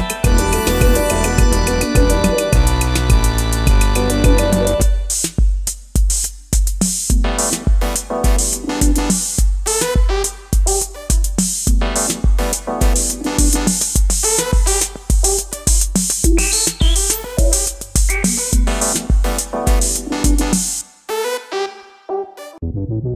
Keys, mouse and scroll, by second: 10.5-12.3 typing.